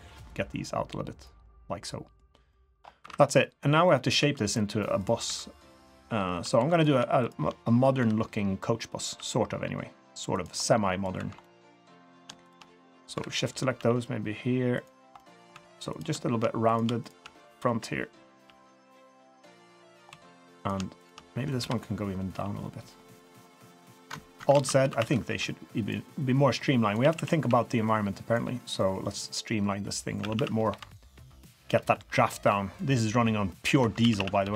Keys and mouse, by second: 0.3 click, 1.4-2.2 middle drag, 2.5 middle drag, 2.8 middle drag, 3.0 3, 3.4 drag, 3.8 drag, 4.2 2, 4.4 click, 5.2 3, 6.6 2, 6.7 click, 7.2 shift+click, 8.0 KP_3, 9.0 g, 10.6-11.0 middle drag, 11.1 2, 11.4 middle drag, 11.6 click, 12.1 click, 13.1 KP_3, 13.8 g, 15.2 drag, 15.5 2, 16.6 click, 17.6 KP_3, 18.4 g, 19.7-20.0 middle drag, 20.1 2, 20.6 click, 21.0 shift+click, 21.6 KP_3, 22.3 g, 24.5 alt+z, 24.8 1, 25.0 1, 25.3 b, 26.4 click, 27.0 a, 27.1 a, 27.4 b, 28.8 click, 30.2-32.0 typing, 33.7 Escape, 34.0 a, 34.2 a, 34.4 b.